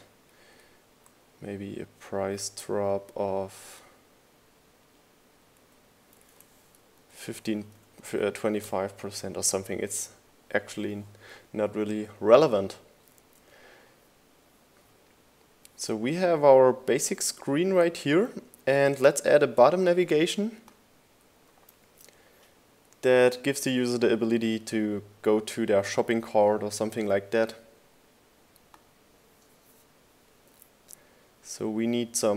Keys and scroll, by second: 0.1 Left, 4.9 Left, 5.3 Right, 6.2 BackSpace, 6.4 5, 7.0 BackSpace, 7.9 5, 21.4 super+s.